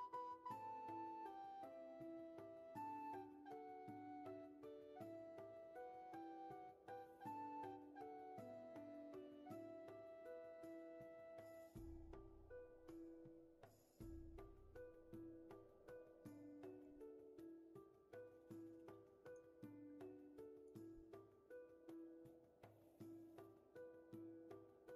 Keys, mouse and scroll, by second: 22.8 ctrl+z.